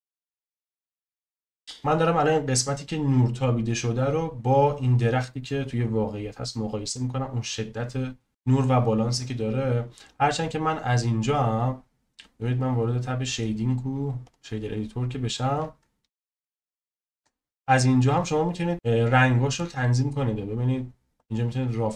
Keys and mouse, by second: 11.6-14.4 drag, 17.5 shift+click, 17.6 shift+middle click, 18.9 shift+middle click, 21.2-21.9 drag.